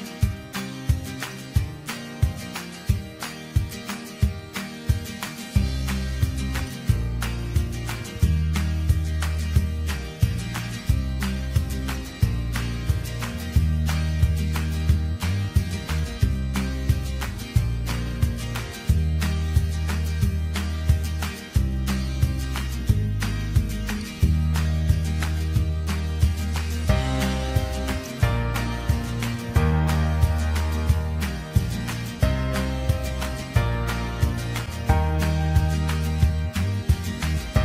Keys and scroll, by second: 8.5 BackSpace, 18.8 BackSpace, 19.5 Delete, 24.4 ctrl+j, 29.5 ctrl+t.